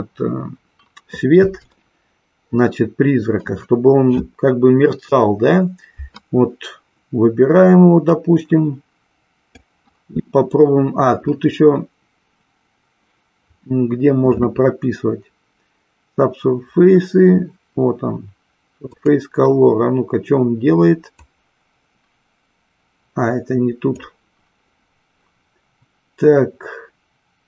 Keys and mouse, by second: 0.0 click, 2.0-3.6 shift+middle drag, 8.2-9.7 drag, 18.9 click.